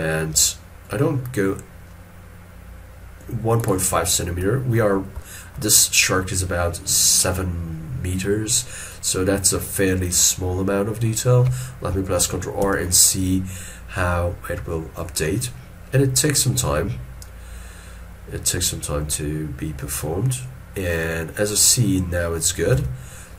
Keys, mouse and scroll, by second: 9.2 middle click, 12.7 ctrl+r, 21.7 middle click, 22.7 scroll up 1, 22.8 alt+e.